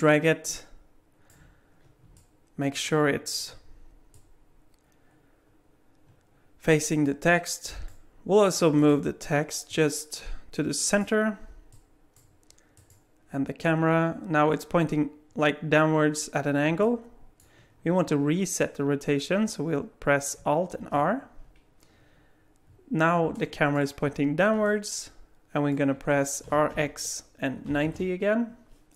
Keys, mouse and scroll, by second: 2.1 alt+middle click, 4.1 click, 8.8 click, 9.7 click, 11.7 click, 12.8 click, 16.8 middle click, 20.8 alt+r, 23.4 alt+middle click, 24.6 middle click, 26.4 r.